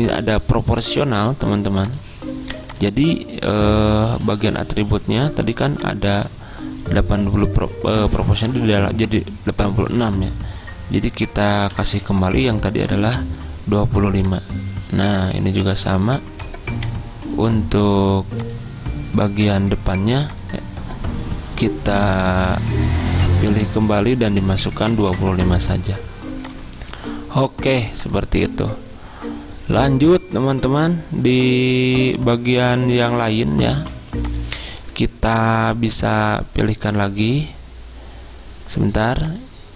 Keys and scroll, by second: 11.8 typing, 25.0 typing.